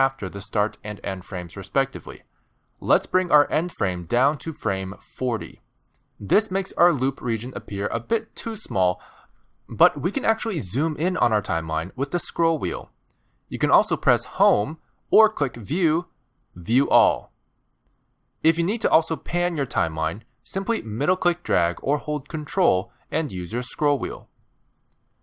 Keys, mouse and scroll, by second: 4.3 click, 11.9-12.8 scroll up 1, 12.8-14.7 scroll up 7, 14.7 scroll down 2, 15.7 Home, 17.6 click, 20.3 middle click, 23.5-24.2 ctrl+scroll down 5, 24.2 ctrl+scroll up 4, 24.8-25.2 scroll down 7.